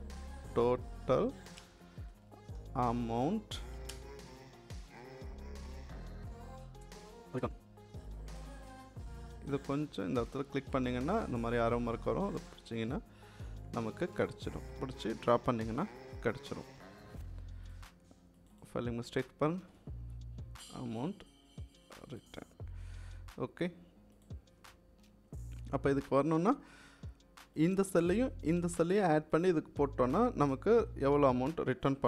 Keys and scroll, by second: 0.0-7.8 typing, 19.6 t.